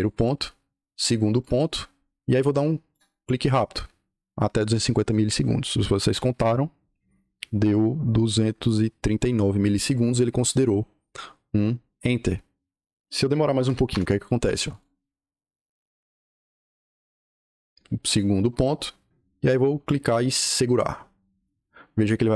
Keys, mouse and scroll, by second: 0.0 click, 1.3 click, 2.8-7.3 right drag, 13.6 l, 13.8 Return, 14.6 click, 18.0 click, 20.3-21.3 right drag.